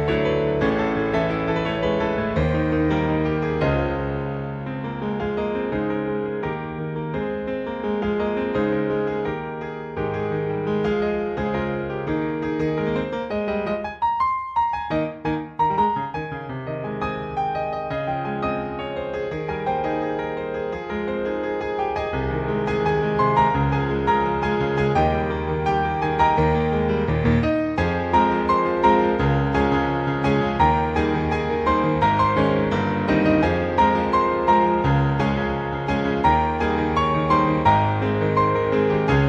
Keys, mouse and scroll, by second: 0.9-2.5 scroll up 8, 2.5 click, 3.8 click, 7.9 ctrl+z, 9.0 click, 12.0 click, 18.1 click, 19.6 click, 20.0-22.3 scroll down 14, 22.5 click, 27.7 click, 29.9 ctrl+z, 31.6 ctrl+Tab, 32.3 click, 32.8 ctrl+Tab, 35.3 click.